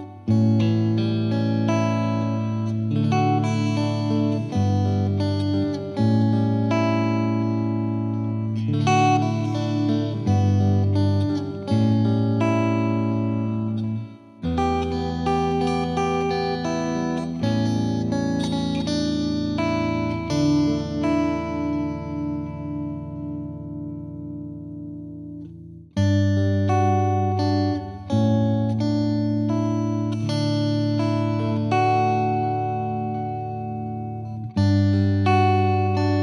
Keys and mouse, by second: 1.0 click, 1.1 click, 1.7 click, 1.8 click, 2.1 click, 2.2 click, 2.5 click, 2.6 click, 2.9 click, 3.0 click, 3.5 click, 3.6 click, 4.0 click, 4.0 click, 4.9 click, 5.0 click, 5.4 click, 5.4 click, 6.0 click, 6.0 click, 6.7 click, 7.1 click, 7.3 click, 7.6 click, 8.0 click, 8.2 click, 8.5 click, 8.5 click, 8.6 click, 9.1 click, 9.1 click, 9.2 click, 9.7 click, 9.8 click, 10.6 click, 11.2 click, 12.0 click, 12.4 click, 12.9 click, 13.4 click, 14.0 click, 14.5 click, 15.3 click, 15.8 click, 17.0 click, 17.4 F2, 18.0 click, 18.4 click, 19.3 click, 19.6 Delete, 20.3 click, 20.6 F3, 20.8 F3, 20.9 F2, 21.1 click, 21.5 click, 22.0 click, 22.4 click, 23.1 click, 23.9 click, 24.5 Delete, 25.1 click, 25.6 click, 26.2 click, 26.6 click, 27.5 Delete, 27.8 click, 27.9 Delete, 28.4 click, 29.2 click, 29.8 click, 30.3 click, 30.8 click, 31.2 click, 31.9 right click, 32.1 F3, 32.2 F3, 32.9 F2, 33.2 click, 34.1 click, 34.6 click, 34.9 click, 35.9 click.